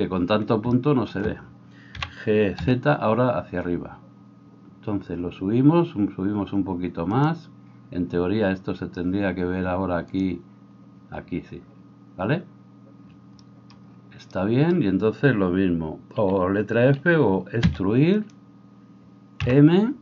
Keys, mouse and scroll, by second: 2.3 g, 10.2 click, 10.3-20.0 middle drag, 18.8 e, 19.5 m.